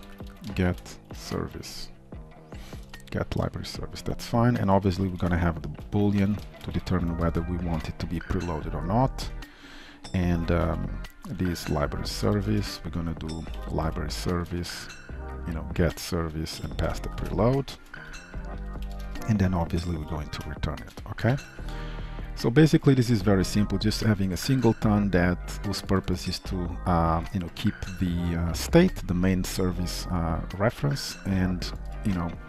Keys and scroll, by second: 7.3 ctrl+shift+Return, 11.7 Return, 17.2 ctrl+shift+Return, 17.7 ctrl+shift+Return, 19.0 Return, 21.4 ctrl+s.